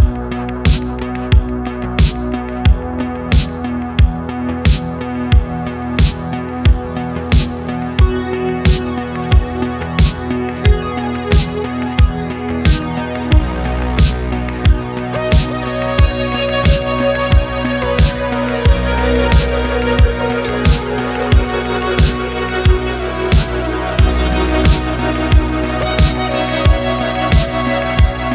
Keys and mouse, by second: 0.1-1.2 middle drag, 1.3-1.6 middle drag, 2.4 middle click, 3.0 middle click, 3.5 shift+middle click, 4.1 click, 4.6 shift+middle drag, 5.2 shift+click, 5.7-6.1 middle drag, 6.4 middle click, 6.9 click, 10.5 click, 10.9 middle click, 11.9 shift+click, 13.7-17.3 drag, 18.4-19.6 middle drag, 19.7-21.8 middle drag, 22.5-23.2 middle drag, 23.8 shift+middle drag, 24.2-24.9 middle drag, 25.2 middle click, 26.1-26.8 middle drag, 27.2-27.6 middle drag, 27.8 shift+middle click.